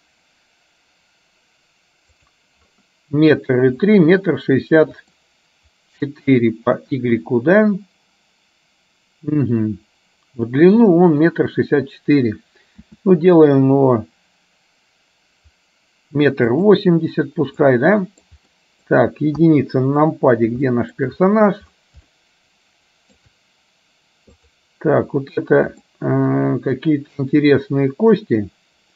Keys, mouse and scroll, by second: 3.9-5.3 shift+middle drag, 17.8 middle click, 17.8-18.3 scroll up 1, 18.5 middle click, 18.5-19.0 scroll up 1, 19.5 KP_1, 20.8 shift+middle click, 21.0 shift+scroll down 1, 22.1-23.3 shift+middle drag, 26.0-28.9 middle drag.